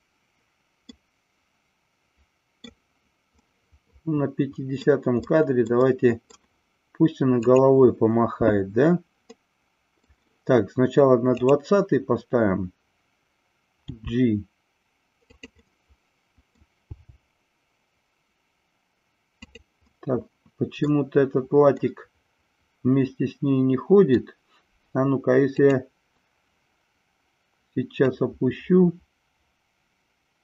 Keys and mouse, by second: 0.9-2.5 middle drag, 3.4-4.8 middle drag, 5.2-5.7 middle drag, 5.8 middle click, 9.3-10.1 middle drag, 11.4 click, 13.8 g, 15.3 click, 15.5-16.5 middle drag, 16.8 g, 19.9 middle click, 21.7-24.2 middle drag, 25.5-27.2 drag, 28.1-30.4 drag.